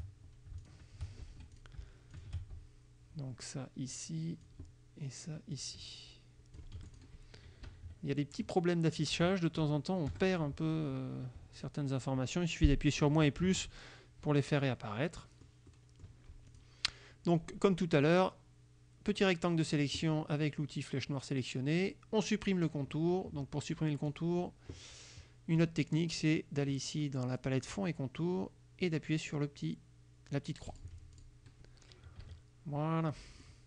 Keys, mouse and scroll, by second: 0.7 shift+click, 1.4 shift+F2, 1.6 shift+click, 2.2 shift+click, 4.0 click, 5.6-6.8 drag, 6.8 F1, 7.0 click, 7.7 KP_Subtract, 9.2 KP_Subtract, 9.7 KP_Add, 11.6 click, 13.2 KP_Subtract, 13.5 KP_Add, 14.6-15.7 drag, 15.8 middle click, 16.6 click, 18.0-19.5 drag, 24.2 click, 25.6 click, 30.8 click, 31.2 click, 32.3 KP_Subtract, 33.2 click.